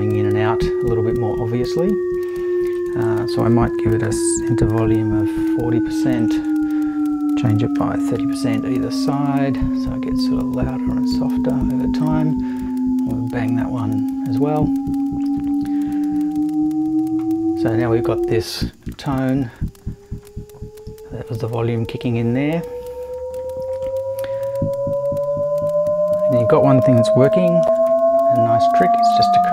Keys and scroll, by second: 3.8-5.3 typing, 7.2-8.6 typing, 27.2 super+c, 27.6 super+v.